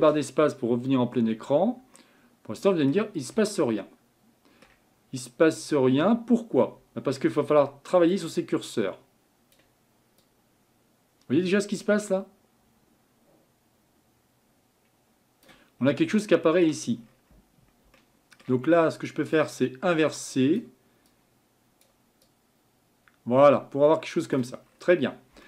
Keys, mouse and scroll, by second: 0.0 ctrl+space, 1.1-1.9 scroll up 6, 2.0-8.2 middle drag, 8.2-13.9 drag, 15.8-16.1 scroll down 2, 16.1-17.0 middle drag, 17.0-17.9 scroll up 4, 17.9-19.5 scroll up 1, 19.5-25.4 drag.